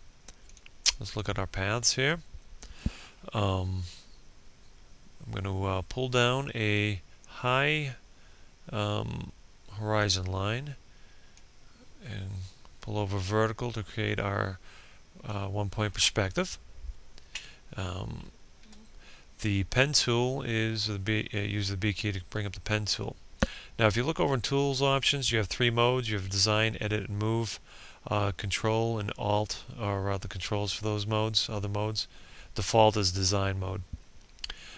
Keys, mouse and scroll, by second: 0.0-15.2 drag, 18.0 b.